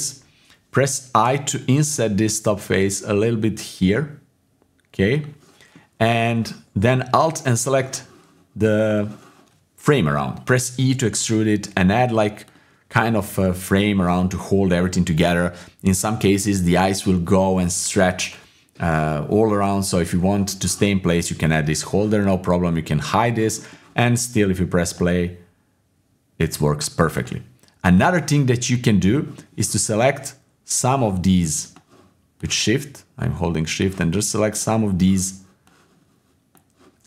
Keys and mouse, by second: 1.2 i, 5.7 click, 7.4 alt+click, 8.6 click, 10.8 e, 12.4 e, 21.6 Tab, 23.0 click, 23.6-24.6 middle drag, 24.9 click, 27.2 click, 28.3-29.0 middle drag, 29.4 middle click, 31.0 click, 32.6-33.2 shift+drag, 33.8 shift+click, 35.8 shift+click.